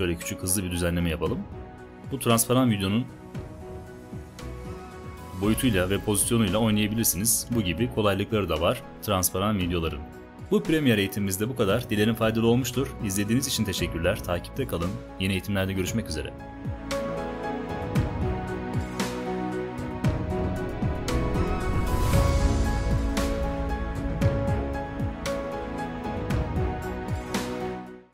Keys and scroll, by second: 3.5 shift+Down, 4.7 Return.